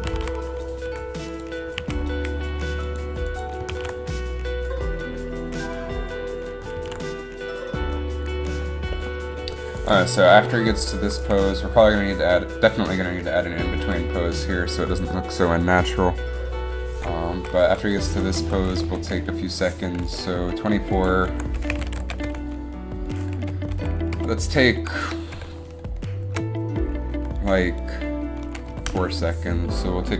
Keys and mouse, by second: 0.2 a, 0.3 a, 1.0 i, 2.0 a, 3.9 alt+a, 7.0 alt+a, 9.9-11.0 drag, 11.5 Left, 11.8 Right, 17.5-18.7 Right, 18.9 Right, 19.0 Right.